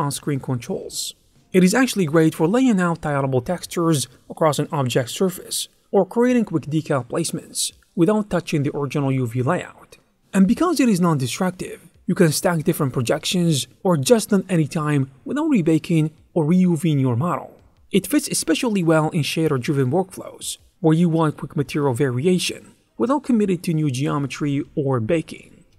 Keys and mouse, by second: 0.1 click, 0.3 middle click, 0.5 click, 0.6-2.0 ctrl+middle drag, 2.0 click, 2.2 middle click, 3.9 click, 4.0 x, 4.7 ctrl+middle click, 5.2 click, 5.5 click, 5.9 ctrl+middle click, 6.8 ctrl+middle click, 7.2 click, 7.8 ctrl+shift+middle click, 8.4 shift+middle click, 9.4 click, 9.9 ctrl+a, 10.2 Tab, 10.5 3, 11.3 ctrl+z, 12.2 click, 12.6 Tab, 13.1 click, 13.3 click, 13.9 click, 14.8 click, 15.6 shift+f, 16.0 click, 16.3 Tab, 17.6 Tab, 18.1 click, 18.3 ctrl+shift+middle click, 19.0 click, 19.4 ctrl+shift+middle click, 19.7 Tab, 20.3 ctrl+f, 22.4 click, 22.8 Tab, 23.7 click, 24.2 middle click, 24.8 click, 25.6 middle click.